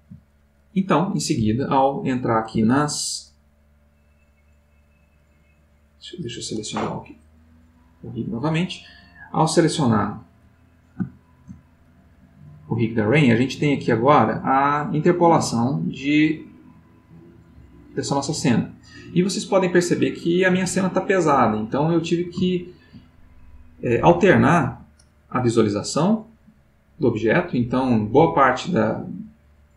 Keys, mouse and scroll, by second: 2.8 Tab, 5.1 click, 7.9 middle click, 11.0 shift+middle click, 12.2-18.7 drag, 20.5-23.1 middle drag, 24.7 middle click, 26.1 click, 27.9 middle click, 29.0-29.7 drag.